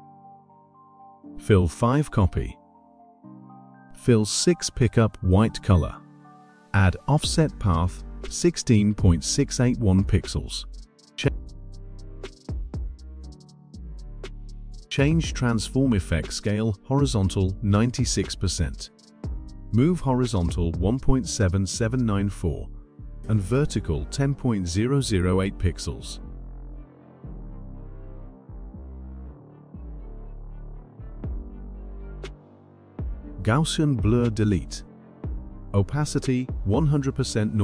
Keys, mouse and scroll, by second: 2.7 click, 6.1 click, 7.3 click, 8.6 click, 10.2-13.6 typing, 14.4 click, 15.6 click, 17.5-18.4 typing, 18.6-21.0 drag, 21.0-21.4 typing, 22.4-23.7 typing, 24.9-26.3 drag, 26.3-27.2 typing, 28.9-30.6 typing, 31.4 click, 32.7 click, 34.1-35.7 drag, 36.5 1, 37.3 click.